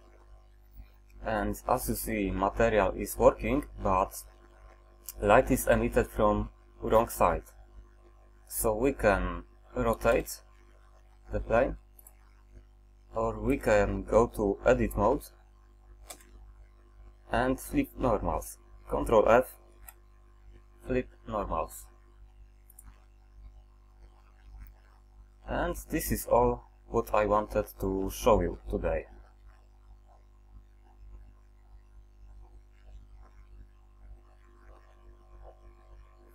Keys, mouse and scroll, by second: 0.0 ctrl+Up, 1.7-2.2 middle drag, 10.2 r, 13.7 ctrl+z, 16.2 Tab, 19.8 ctrl+f, 24.2 middle click, 24.4 middle click, 24.6 middle click.